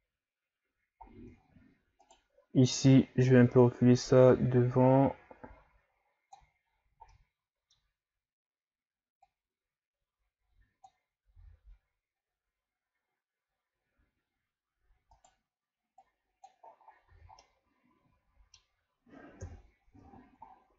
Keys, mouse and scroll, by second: 1.0 scroll down 2, 1.4 ctrl+scroll up 3, 2.1-2.9 right drag, 2.9-5.9 drag, 6.8-7.1 scroll down 1, 7.1-9.2 middle drag, 9.2-11.4 drag, 11.4 s, 16.0 click, 16.7-17.1 scroll down 4, 17.1 a, 17.4-19.4 middle drag, 19.4 KP_3, 20.2 scroll down 1, 20.5-20.7 scroll up 5.